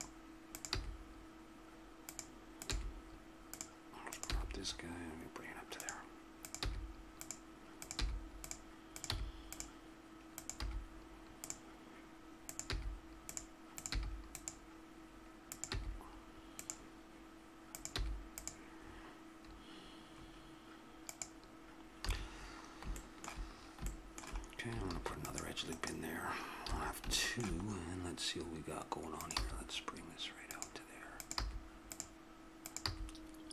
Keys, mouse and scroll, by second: 0.7 g, 2.7 g, 4.3 g, 5.9 click, 6.4-10.6 drag, 6.6 g, 8.0 g, 9.1 g, 10.6 g, 12.7 g, 13.9 g, 15.7-17.3 drag, 15.7 g, 17.7-20.1 drag, 18.0 g, 20.1 middle click, 21.1-22.4 right drag, 22.1 a, 23.0-24.9 middle drag, 24.9 ctrl+r, 26.7 a, 29.1 right click, 29.4 g, 31.4 g, 32.9 g.